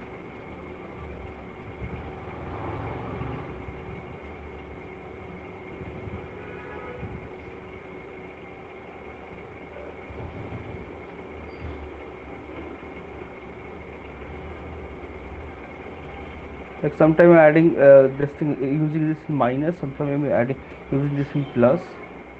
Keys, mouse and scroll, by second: 1.9 click, 3.0 click, 7.1 click, 8.2 click, 9.2 click, 10.2 shift+click, 11.2 alt+click, 12.4 click, 13.9 alt+click, 16.6 click, 17.2 alt+click, 17.8 click, 18.5 alt+click.